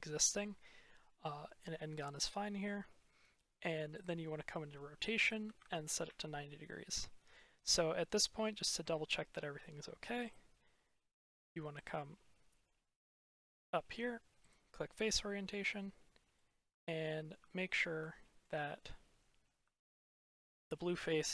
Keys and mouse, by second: 3.8-6.4 drag, 10.1-11.3 drag, 11.8-14.9 drag, 15.5-16.2 middle drag, 16.7-17.2 shift+middle drag, 18.0 shift+middle click, 19.5-20.1 shift+middle drag, 20.4 middle drag.